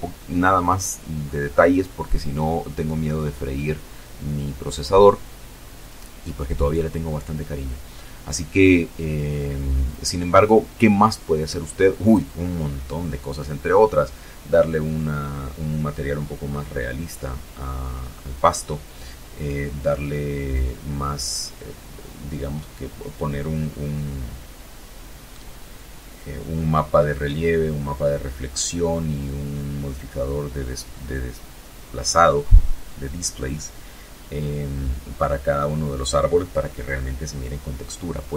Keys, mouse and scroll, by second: 35.3 scroll down 2, 35.8 scroll up 2, 36.4 scroll up 2, 36.8 scroll down 2.